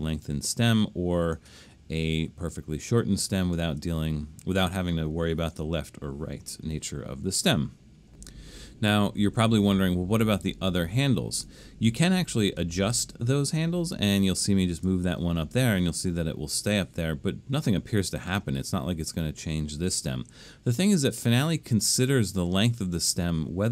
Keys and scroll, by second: 6.6 9.